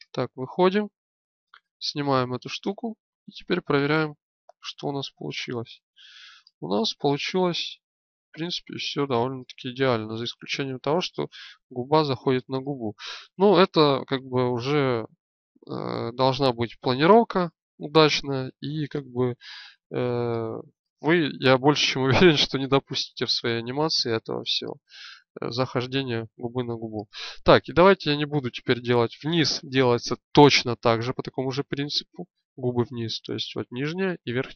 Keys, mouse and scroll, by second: 2.7-6.2 drag, 6.2-9.2 middle drag, 9.2-12.1 drag, 12.4 middle click, 18.2 middle click, 25.5-27.4 drag.